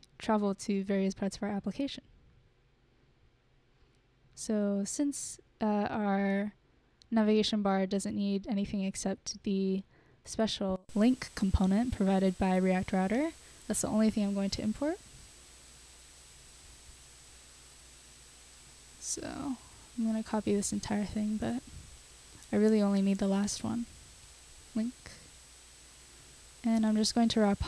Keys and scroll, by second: 21.0 super+c, 21.2 super+c, 21.3 super+c, 22.1 Return, 22.3 super+v, 24.7 BackSpace, 24.9 BackSpace, 25.3 super+s.